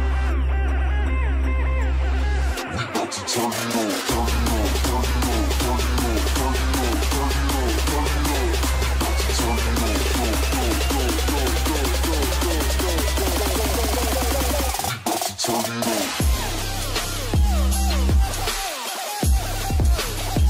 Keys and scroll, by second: 0.4 ctrl+s, 3.1 ctrl+space, 4.7 ctrl+space, 9.8 ctrl+alt+space, 12.5 ctrl+alt+space, 13.3 ctrl+alt+space, 16.3 ctrl+space.